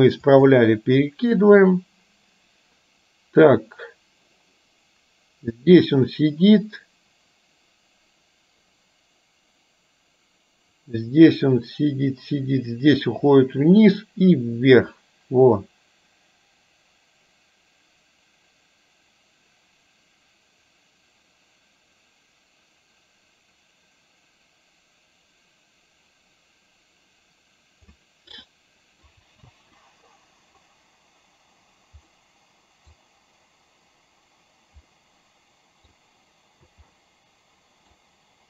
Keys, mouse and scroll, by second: 1.3-28.0 drag, 28.5-29.1 middle drag, 29.5 space, 32.1-32.9 middle drag, 34.9-35.9 middle drag, 36.8 space, 37.0-38.0 middle drag.